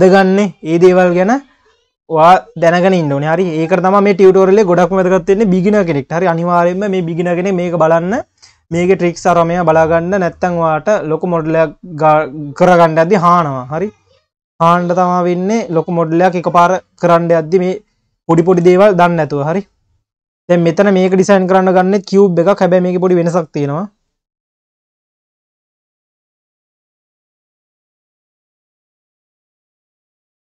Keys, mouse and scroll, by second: 3.8 scroll up 2, 4.4-7.4 scroll up 6, 9.3-12.1 scroll down 1, 12.1-13.4 drag, 13.9-14.7 scroll down 2, 15.0-15.7 scroll down 2, 15.7 click, 16.4-18.5 scroll down 1, 18.5 shift+a, 21.8 s, 22.9 scroll up 3, 28.1 s.